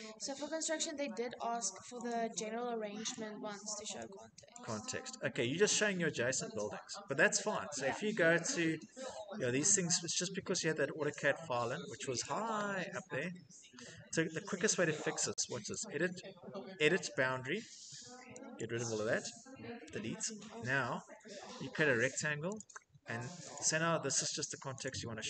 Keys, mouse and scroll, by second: 0.4-1.3 scroll, 2.3 middle click, 2.6 scroll, 2.8 click, 4.2 click, 4.4 scroll, 5.4-6.3 scroll, 7.0 click, 7.2 middle click, 7.3 middle click, 7.4 middle click, 8.2 middle click, 8.5 middle click, 8.6 middle click, 8.6 middle click, 9.5 middle click, 9.7 middle click, 10.3 middle click, 11.4 middle click, 11.5 middle click, 11.9 click, 12.2 middle click, 12.3 middle click, 13.0 middle click, 13.6 middle click, 13.7 middle click, 13.8 middle click, 14.3 middle click, 15.5 click, 16.2 scroll, 17.0-17.4 scroll, 18.3 click, 19.6 Delete, 20.0-20.8 scroll, 22.3 click, 23.2 click, 24.5 click.